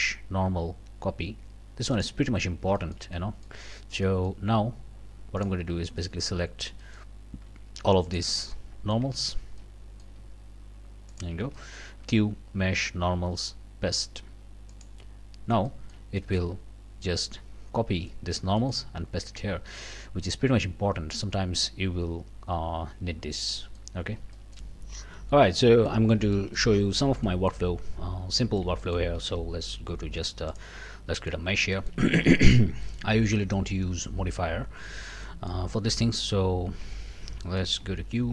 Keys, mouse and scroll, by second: 1.9 middle click, 2.4 scroll down 1, 2.8 shift+middle click, 3.6 shift+scroll up 1, 4.0 middle click, 5.4 middle click, 6.0 shift+middle click, 6.5 shift+scroll down 1, 6.8 shift+middle click, 8.0 shift+click, 8.5 shift+click, 9.2 shift+click, 9.6 shift+click, 11.1 shift+click, 11.5 shift+click, 12.0 shift+q, 14.7 click, 15.3 scroll down 3, 15.7 shift+click, 16.2 shift+click, 18.1 shift+click, 19.2 Tab, 19.8 click, 24.1 shift+middle click, 25.7 click, 26.4 shift+middle click, 26.9 shift+scroll down 2, 27.3 middle click, 27.8 scroll up 2, 28.4 shift+middle click, 29.2 shift+a, 30.5 click, 30.9 scroll down 2, 31.2 click, 31.4 scroll up 3, 31.7 shift+click, 32.4 scroll down 1, 32.8 middle click, 35.2 middle click, 36.2 Tab, 37.4 middle click, 37.8 q.